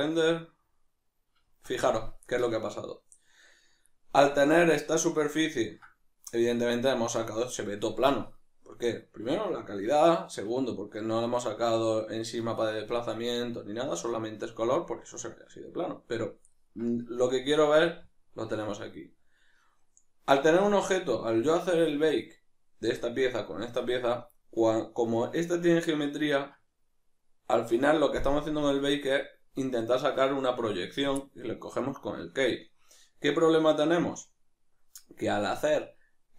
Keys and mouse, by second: 1.0-36.3 middle drag.